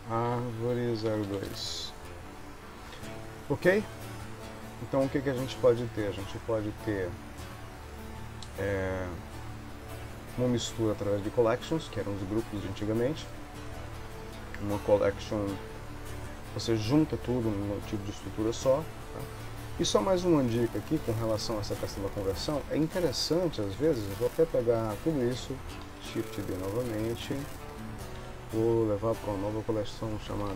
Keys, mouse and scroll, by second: 1.5 Return, 3.0 ctrl+s, 20.0 ctrl+s, 21.1 click, 21.7 click, 22.8 click, 23.9 click, 26.0 shift+d, 28.3 m.